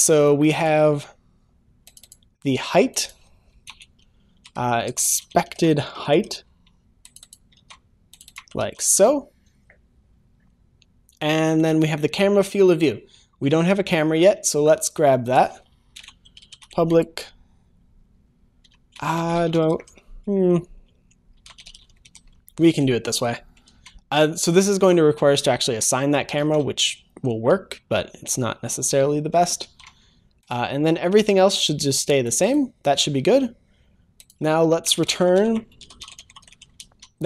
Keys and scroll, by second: 7.6 ctrl+c, 8.6 ctrl+s, 22.6 ctrl+s, 23.6 ctrl+s, 26.5 ctrl+s, 29.6 ctrl+s, 36.8 ctrl+s.